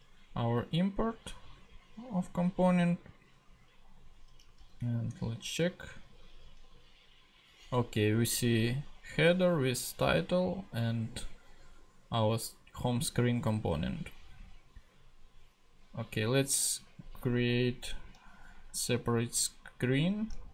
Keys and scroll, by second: 4.6 super+Tab, 17.3 Right.